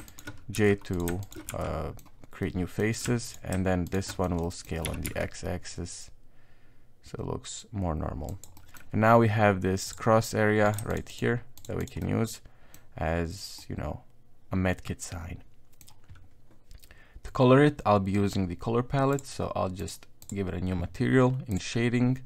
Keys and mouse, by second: 0.1 shift+right click, 0.5 j, 0.9 right click, 1.2 shift+right click, 1.5 j, 1.6 middle click, 2.4 middle click, 3.3 alt+right click, 3.9 alt+shift+right click, 4.4 middle click, 4.8 s, 8.5 middle click, 9.9 click, 10.7 right click, 10.9 shift+right click, 11.1 shift+right click, 11.6 shift+right click, 11.8 shift+right click, 12.0 middle click, 13.6-15.8 middle drag, 19.8 click.